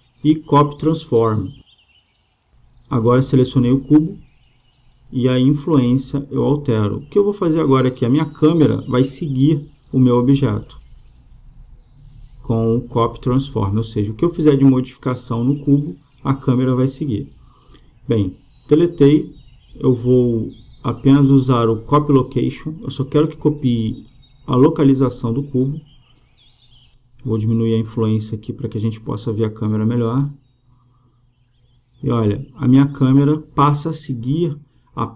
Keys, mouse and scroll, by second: 4.7-6.4 drag, 8.7-10.5 drag, 12.0-13.6 drag, 20.8-23.5 drag, 27.3-29.1 drag, 32.6-34.3 drag.